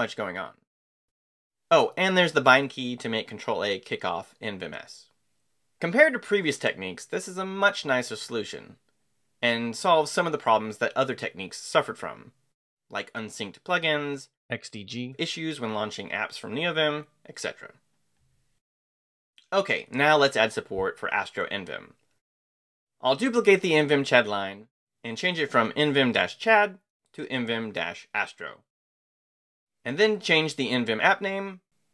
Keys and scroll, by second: 22.2-24.6 typing, 26.2-28.2 typing, 30.0-31.9 typing.